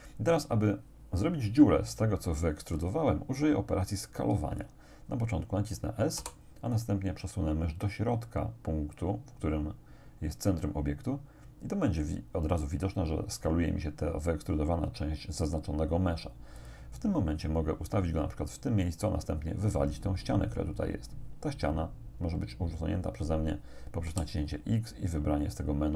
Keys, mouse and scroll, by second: 6.2 s, 16.6 click, 24.1 x.